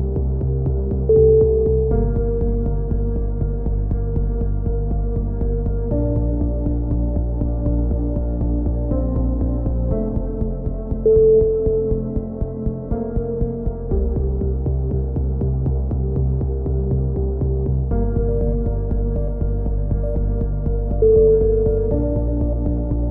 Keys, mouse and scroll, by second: 0.3 Tab, 0.6 click, 3.9 middle click, 4.4 ctrl+KP_7, 5.2 Tab, 5.4 z, 6.4 z, 6.7 z, 7.4 z, 7.8 middle click, 8.6 z, 9.6 g, 12.4 z, 12.8 right click, 12.8 z, 13.4 g, 15.2 a, 15.6 z, 16.0 z, 17.7 click, 18.0 z, 18.7 k, 20.8 z, 21.2 a.